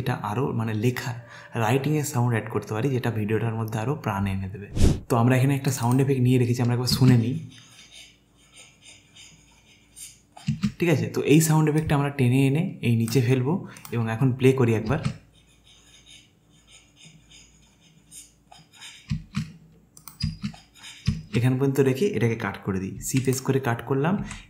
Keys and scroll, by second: 7.0 space, 10.5 space, 14.9 space, 19.3 space, 23.0 c, 24.2 v.